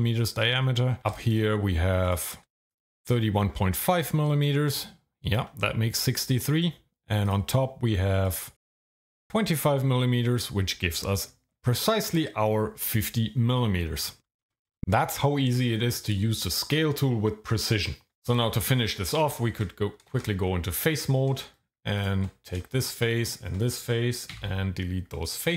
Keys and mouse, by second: 1.3 shift+click, 7.3 click, 8.2 shift+click, 8.9 click, 19.2 Tab, 20.1 shift+z, 24.3 x.